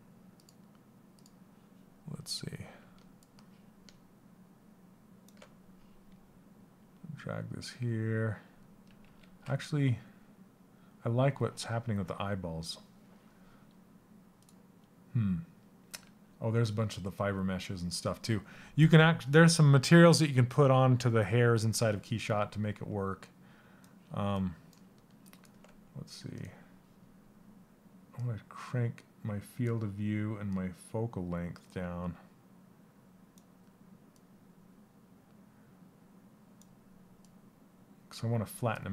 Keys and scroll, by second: 8.5 ctrl+z.